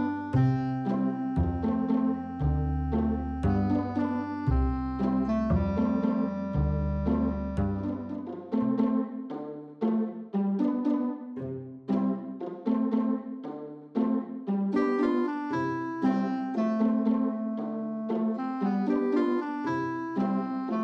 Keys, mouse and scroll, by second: 0.7 click, 3.0 ctrl+click, 10.9-12.5 drag, 14.1 click, 14.7 click, 17.4 click, 18.4 click.